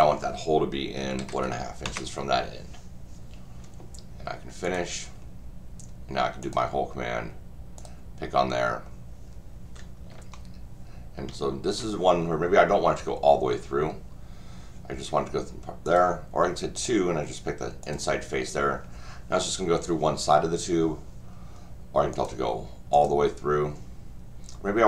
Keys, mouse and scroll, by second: 4.6 click, 6.4 click, 7.8 click, 10.3-11.7 shift+middle drag, 15.8 click, 16.7 click, 17.8 click, 22.1 click, 22.9 click.